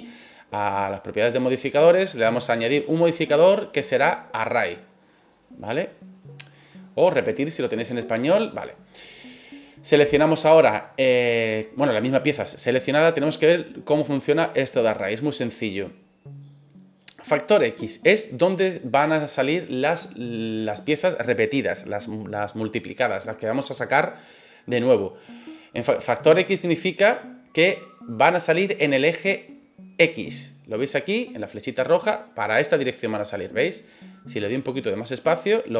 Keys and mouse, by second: 0.8 click, 2.4-5.8 drag, 8.0 middle click, 34.3-35.5 drag.